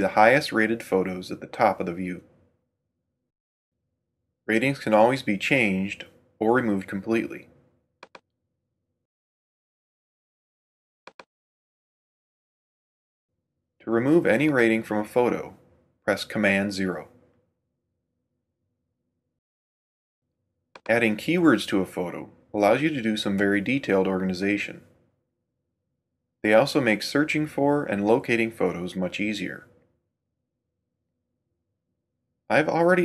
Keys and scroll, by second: 16.0 super+0.